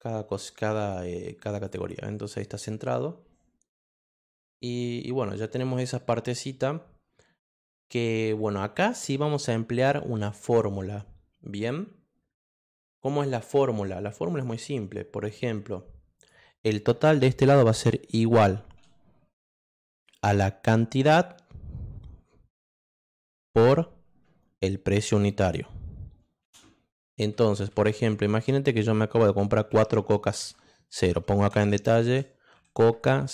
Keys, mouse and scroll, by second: 0.8 click, 12.3-12.8 scroll up 2, 12.8-13.3 scroll down 2, 13.7 scroll up 2, 14.2 click, 16.1 click, 18.5 shift+0, 21.0 click, 23.2 shift+=, 25.1 click, 29.7 4, 31.1-33.3 typing.